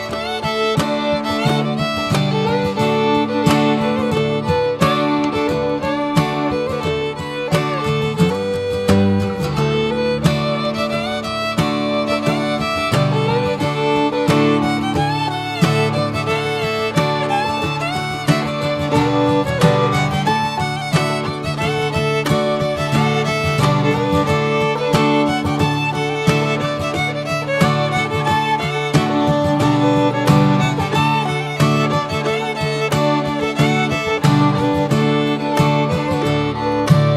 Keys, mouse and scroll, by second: 0.8 click, 1.2 shift+middle click, 1.5 click, 1.7 ctrl+a, 2.3 click, 2.4 Tab, 3.1 shift+middle click, 3.6 click, 4.8 ctrl+r, 7.4 scroll down 1, 7.7 middle click, 8.5-9.1 scroll up 2, 8.6 middle click, 9.1 shift+middle click, 9.9-10.3 scroll up 2, 11.2 ctrl+r, 14.0 scroll down 2, 14.3 Tab, 14.5-15.0 middle drag, 15.0 click, 15.4 ctrl+1, 15.9 ctrl+2, 16.1 ctrl+drag, 16.5-16.9 middle drag, 16.9 drag, 17.1 drag, 17.5-18.2 middle drag, 18.2 click, 18.7 ctrl+1, 19.0 ctrl+2, 19.2 drag, 19.6-20.0 middle drag, 20.0 click, 20.6 right click, 20.6 click, 21.0 alt+middle click, 21.3 drag, 21.7 shift+middle click, 21.8 shift+scroll up 1, 22.1 middle click, 22.5 Tab, 22.9-24.1 middle drag, 24.1 Tab, 24.5 click, 24.9 Tab, 25.3 alt+middle click, 25.6 alt+z, 26.0 click, 28.1 ctrl+r, 29.5 middle click, 30.0 alt+z, 30.1 click, 30.5 middle click, 31.3 click, 31.6 Tab, 32.0 alt+middle click, 32.4 alt+z, 32.9 click, 34.5 shift+middle click, 35.3 click, 36.6 s.